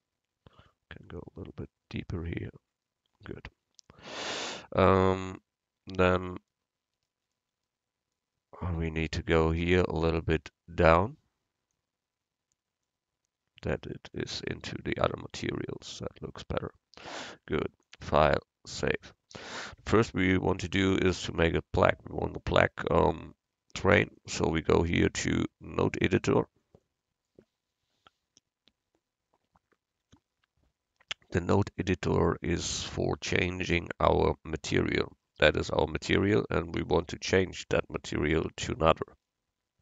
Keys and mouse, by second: 0.6-2.6 right drag, 1.3-3.2 drag, 2.8-4.6 right drag, 5.6 middle click, 7.0 middle click, 8.9 right click, 9.5 Tab, 11.8-13.7 right drag, 14.4 Tab, 17.9-19.9 drag, 24.3-26.2 drag, 31.5-37.1 middle drag.